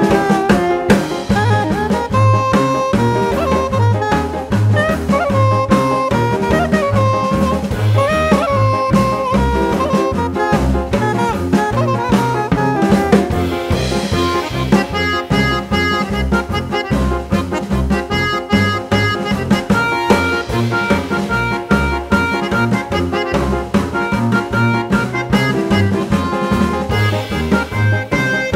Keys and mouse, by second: 2.3-3.3 drag, 4.0 click, 6.3-7.5 drag, 8.3 click, 9.9-11.6 drag, 12.2-14.1 drag, 15.8 click, 17.3-18.5 drag, 19.7 click, 23.1 click, 24.7-25.8 drag, 26.5-27.8 drag.